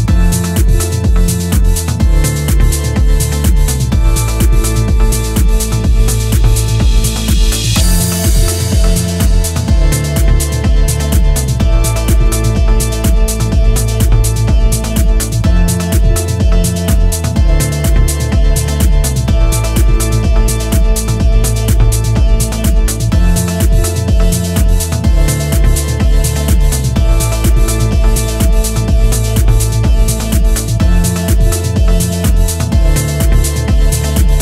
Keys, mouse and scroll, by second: 5.3 middle click, 5.8-6.5 scroll up 2, 6.5-6.9 scroll down 2, 7.1 shift+middle click, 7.6 middle click, 8.4 shift+middle click, 9.0-9.6 scroll up 1, 10.9-11.3 scroll up 1, 11.4-13.7 scroll down 1, 13.7 click, 14.5-15.2 scroll down 5, 15.5 shift+middle click, 16.1 scroll up 3, 17.1 shift+middle click, 19.1-19.4 scroll up 1, 19.9-20.2 scroll down 1, 21.0 Tab, 21.7 Tab, 23.5 click, 24.5 a, 25.4 Tab, 25.6 Tab, 26.9 click, 27.9 a, 29.2 ctrl+j, 31.4 click, 32.5-33.4 scroll down 3, 33.4 middle click, 33.9-34.4 scroll up 3.